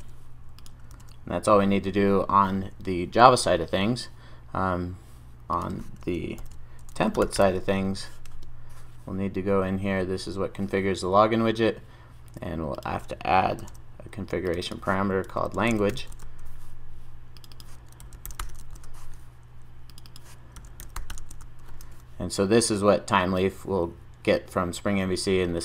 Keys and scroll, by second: 6.5 ctrl+shift+super+o, 13.6 super+d, 21.9 super+s.